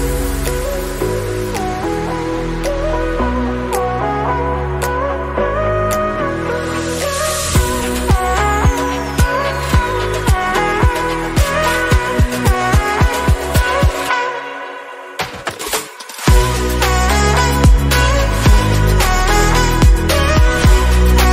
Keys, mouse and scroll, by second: 0.3 /, 0.6-1.3 scroll down 1, 1.3-1.9 scroll down 1, 1.9 Tab, 2.1 scroll up 1, 2.4 shift+middle click, 3.0 click, 3.5 3, 4.0-4.3 scroll up 1, 4.3 shift+click, 4.7 click, 5.6 Tab, 5.8 scroll down 4, 6.0-6.3 middle drag, 6.3-8.5 drag, 12.3-13.0 scroll down 4, 12.6 click, 13.0 click, 14.8-21.3 drag.